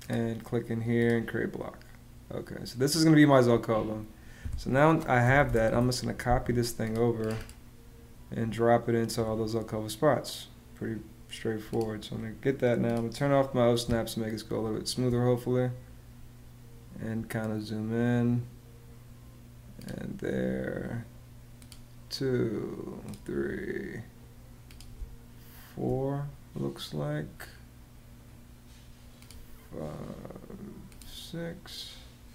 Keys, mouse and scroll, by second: 4.7-5.7 typing, 13.6 space, 24.8 space.